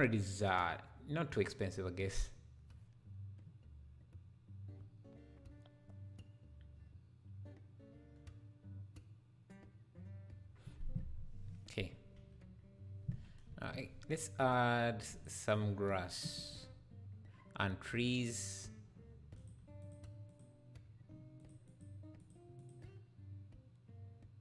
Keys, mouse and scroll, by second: 2.0-3.0 scroll up 1, 13.5 F11, 15.1-24.4 drag.